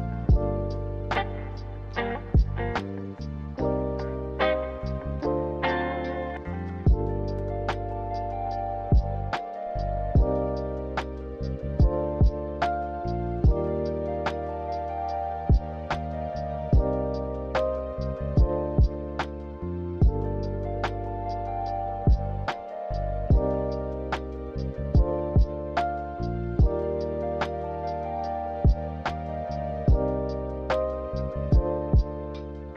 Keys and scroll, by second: 11.3 z, 17.1 a.